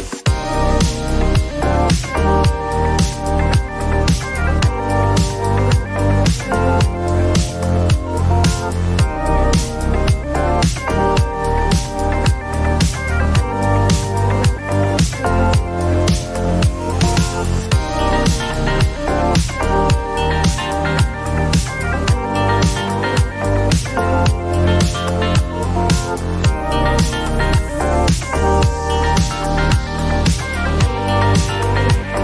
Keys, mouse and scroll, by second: 0.8-2.2 typing, 4.1 click, 4.7-5.5 typing, 5.0 click, 9.6 click, 11.8 click, 13.1 click, 15.4 click, 17.1 click, 19.3 click, 25.1-28.1 typing, 29.5 ..